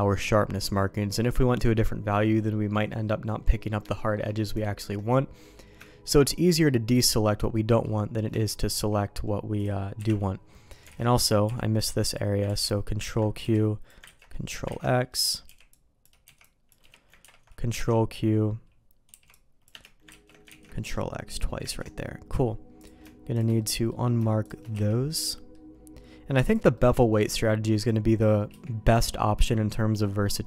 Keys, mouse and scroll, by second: 0.1 middle click, 3.0 middle click, 3.8 shift+middle click, 4.6 shift+middle click, 5.4 middle click, 5.8 shift+middle click, 6.4 middle click, 7.0 middle click, 7.6 middle click, 8.3 shift+middle click, 9.5 click, 10.9 alt+a, 10.9 middle click, 11.4 b, 12.4 ctrl+q, 13.0 ctrl+x, 13.4 b, 14.0 ctrl+q, 14.3 click, 14.6 ctrl+x, 15.0 click, 15.4 b, 16.2 c, 17.2 ctrl+q, 17.7 ctrl+x, 19.0 c, 20.1 ctrl+q, 20.4 ctrl+x, 20.7 middle click, 21.7 ctrl+s, 22.7 click, 23.3 shift+click, 23.5 middle click, 24.4 shift+click, 24.7 q, 25.3 middle click, 26.4 click, 26.7 middle click, 28.4 q, 30.0 middle click.